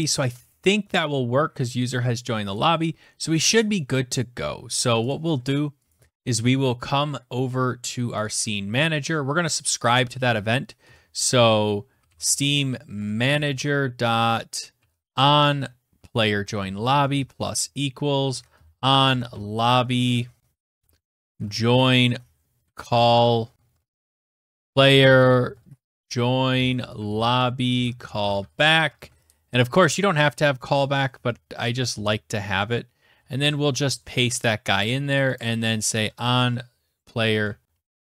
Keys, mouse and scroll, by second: 0.0 scroll, 1.6 click, 5.0 click, 5.1 middle click, 5.2 ctrl+s, 7.3 click, 7.8 scroll down 6, 8.2 scroll up 13, 8.9 scroll down 7, 9.0 click, 9.9 Return, 10.7-29.4 typing, 11.2-11.6 scroll, 30.2 ctrl+v, 31.0 ctrl+z, 32.2 ctrl+c, 32.4 ctrl+v, 34.4 click, 35.0-38.0 typing.